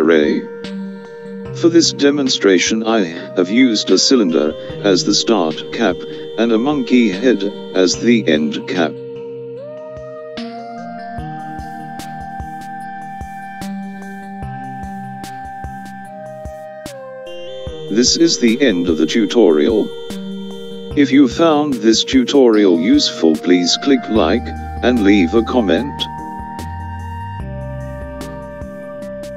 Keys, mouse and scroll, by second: 7.6 click, 14.4 click, 18.3-19.4 scroll down 2, 19.4-20.3 scroll down 1.